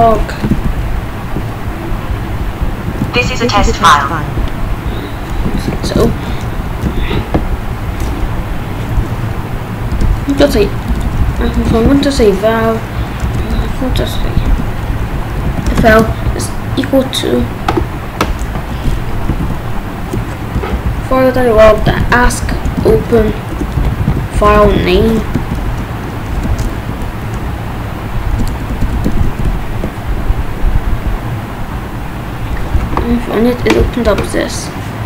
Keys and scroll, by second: 0.0-0.2 typing, 0.5 ctrl+s, 0.7 ctrl+b, 3.0 ctrl+s, 5.5 ctrl+s, 6.3 Up, 7.0 ctrl+s, 8.3 Up, 9.9 Return, 10.1 f, 10.4 space, 10.5 =, 10.9 BackSpace, 11.8 ctrl+s, 13.0 Up, 13.2 Return, 13.9-15.9 typing, 18.7 BackSpace, 19.3 f, 20.5 Return, 20.8-26.3 typing, 26.9 Down, 27.4 BackSpace, 29.2 ctrl+s.